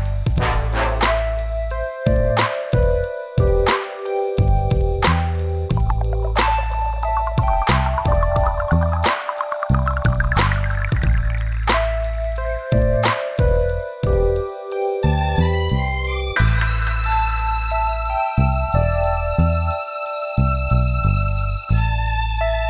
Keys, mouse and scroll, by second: 0.8 click, 1.4 click, 1.7 scroll down 1, 2.2 scroll up 1, 3.6 click, 3.7 click, 4.9 scroll up 2, 6.6 click, 11.2 click, 11.9 click, 12.0 click, 13.6 click, 15.7 scroll down 2, 17.6 scroll up 2, 19.7 click, 19.8 click, 22.2 click.